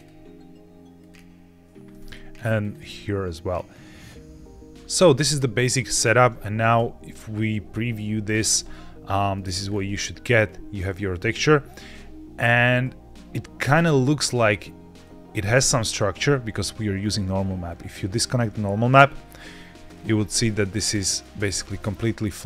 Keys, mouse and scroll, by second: 2.5-4.4 drag, 4.7 click, 5.2 middle click, 6.0-6.7 scroll down 1, 6.7 z, 8.5-9.2 middle drag, 9.5-10.3 scroll up 4, 10.4 scroll down 1, 11.3-11.6 shift+middle drag, 12.3-12.8 scroll up 2, 13.0-13.6 shift+middle drag, 13.8-14.1 middle drag, 14.9 middle drag, 17.6 click, 19.8-20.1 scroll down 2, 20.4-21.1 middle drag, 21.3 scroll up 3, 21.5 scroll down 1.